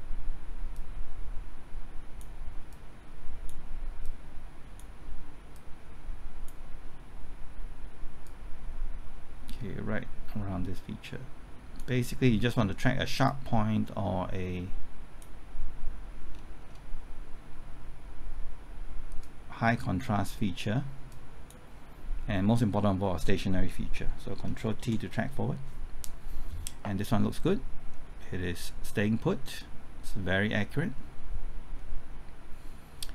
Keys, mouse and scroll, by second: 16.3 scroll down 1, 19.2-20.9 drag, 24.0-24.3 scroll down 1, 24.3 scroll up 1, 24.8 ctrl+t, 27.3-33.1 drag.